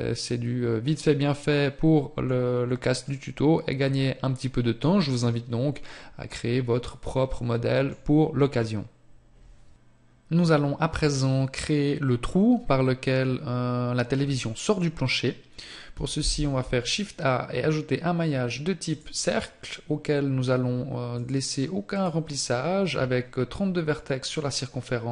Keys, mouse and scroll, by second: 3.1 middle click, 21.2 click, 24.5 scroll up 1.